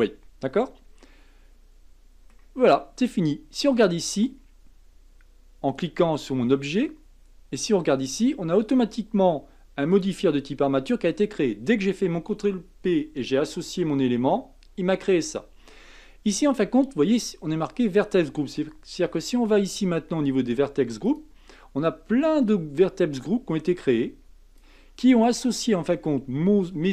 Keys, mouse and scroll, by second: 1.0-4.0 middle drag, 5.7 click, 7.5 click, 9.9-12.9 drag, 21.0 click, 22.8-25.6 drag, 25.6-26.9 middle drag.